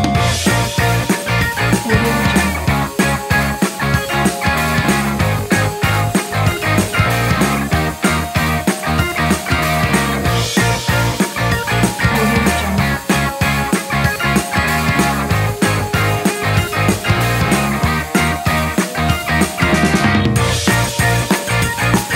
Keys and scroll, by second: 4.1 space, 5.9 BackSpace, 12.9 space, 15.4 space, 20.4 space.